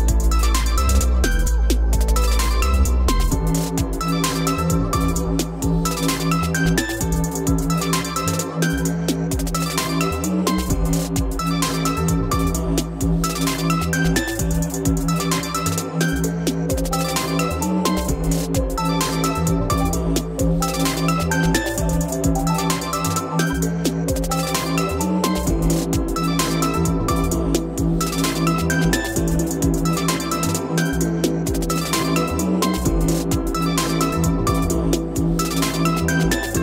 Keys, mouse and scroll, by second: 0.8 click, 2.6 click, 3.1-4.3 typing, 4.1 click, 5.0 click, 6.2 click, 10.6-11.1 scroll down 6, 11.5 o, 12.2 click, 12.7 click, 13.8 click, 14.0-14.6 scroll, 15.1 Escape, 15.3 Escape, 15.3 scroll up 10, 15.4 Escape, 15.5-16.0 scroll, 16.3 click, 17.2 m, 17.7 click, 18.9 click, 19.3-20.6 scroll down 29, 20.6 scroll up 1, 20.8 scroll down 1, 20.9 scroll, 21.1-21.7 scroll up 2, 22.0 scroll, 22.9 o, 24.3 click, 24.7 q, 26.0 ctrl+Up, 26.4-26.7 scroll up 7, 27.8-28.1 scroll up 3, 28.1-28.5 scroll, 28.5 click, 29.4 click, 30.6-33.7 typing, 31.4 Return, 33.2-33.6 scroll, 34.2 scroll down 8, 34.7 click, 34.9-35.3 scroll down 7, 36.2 scroll.